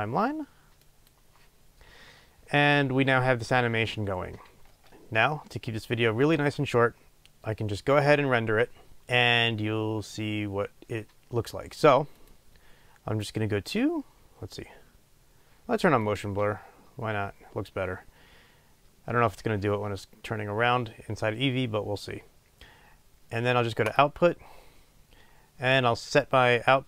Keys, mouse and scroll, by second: 1.1 click, 4.7-16.2 drag, 4.7 space, 4.9 space.